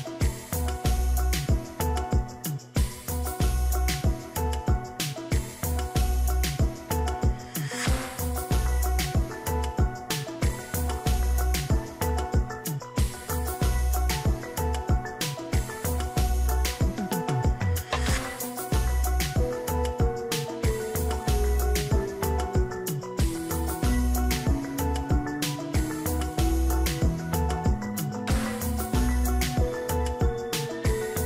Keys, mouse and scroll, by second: 0.8 ctrl+z, 3.8-4.4 [, 30.3 ctrl+d.